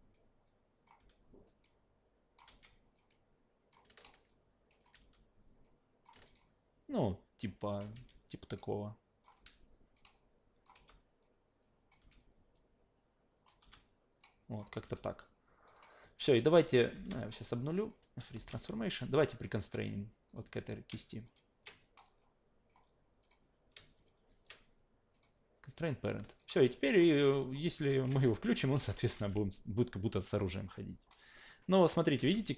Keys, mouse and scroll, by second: 0.4 click, 1.0 w, 1.5-2.4 drag, 2.5 e, 2.9 click, 4.0-4.8 alt+drag, 5.0 w, 5.6 click, 6.2 alt+right drag, 6.4-7.4 alt+drag, 7.9 e, 8.5 click, 9.3 w, 10.0-10.6 drag, 10.7 e, 11.2 click, 12.0 w, 12.5-13.4 drag, 13.6 e, 14.2 click, 14.8 w, 15.2 click, 16.2 alt+right click, 16.9 alt+shift+d, 17.2 click, 17.8 click, 18.3 alt+shift+d, 18.5 alt+middle click, 18.8 alt+right drag, 19.0 alt+drag, 19.3 alt+right click, 19.6 q, 20.3 click, 21.2 shift+click, 23.2 click, 24.0 shift+click, 25.1 click, 25.8 click, 26.3 alt+right click, 26.5 alt+middle click, 26.8 alt+right click, 27.3 alt+middle click, 28.1 alt+v, 28.6 alt+click, 29.0 click, 29.2 alt+v, 29.9 alt+middle click, 30.2 alt+right click, 31.8 alt+middle click, 32.2 alt+v.